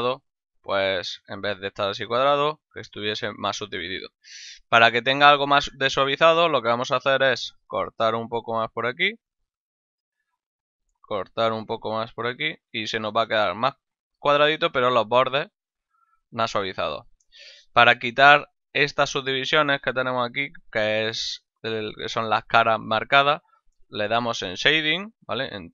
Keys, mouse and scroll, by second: 0.6 click, 2.3 click, 3.5 middle click, 4.7 middle click, 5.5 Tab, 7.1 ctrl+r, 7.9 ctrl+KP_Add, 8.7 KP_Enter, 10.0 right click, 10.3 middle click, 11.4 ctrl+r, 12.2 ctrl+KP_Add, 13.0 KP_Enter, 14.3 Tab, 15.1 right click, 15.7 Tab, 16.3 middle click, 19.9 middle click, 20.9 shift+middle click.